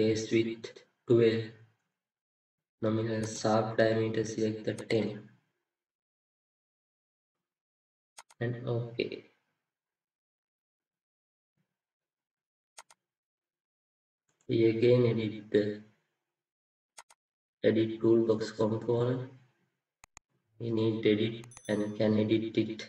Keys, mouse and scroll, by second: 9.0 double click, 14.2 right click.